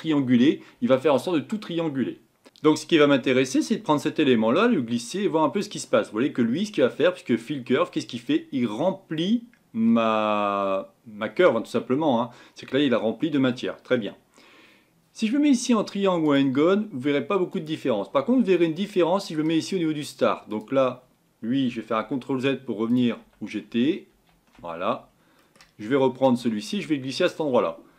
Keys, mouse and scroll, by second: 2.7 n, 5.6 click, 16.3 click, 17.5 click, 22.0 ctrl+z, 23.7 ctrl+z, 27.4 click, 27.7-27.9 scroll up 4.